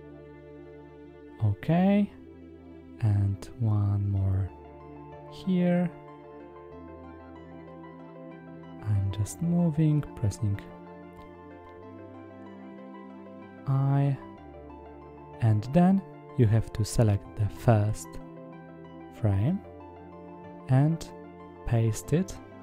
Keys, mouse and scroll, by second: 0.6 middle click, 4.8 click, 6.2 middle click, 9.4 middle click, 10.8 i, 13.0-14.4 drag, 15.4 ctrl+c, 17.0 click, 17.5 click, 19.2 click.